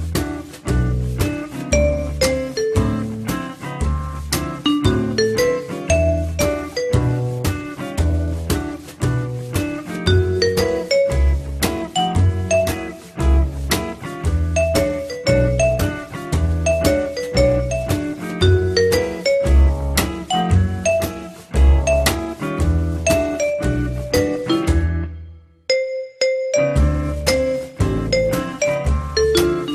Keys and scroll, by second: 9.7 m, 15.1 F3.